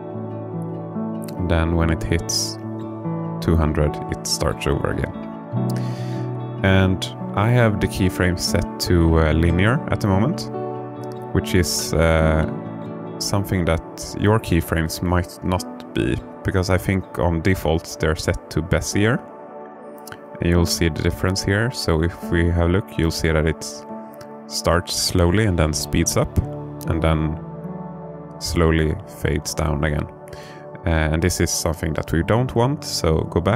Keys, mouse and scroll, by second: 8.1 space, 9.3-10.7 drag, 13.2 click, 14.2-16.3 drag, 18.6-24.8 right drag, 25.4 space.